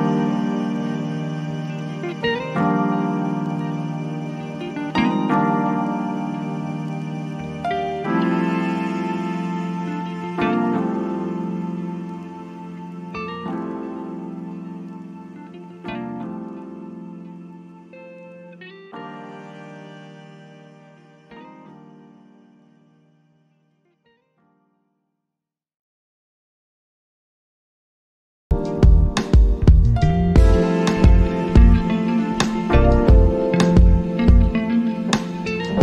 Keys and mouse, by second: 3.8 click, 14.7 click, 18.5-19.9 drag, 22.3-26.2 drag.